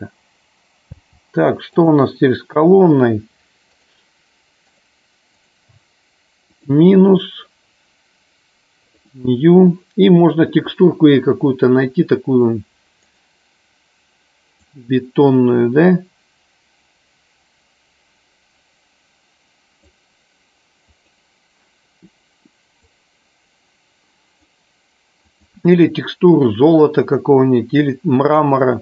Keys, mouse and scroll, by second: 1.0 space, 3.9 click, 4.6 click, 6.5 click, 9.2 click.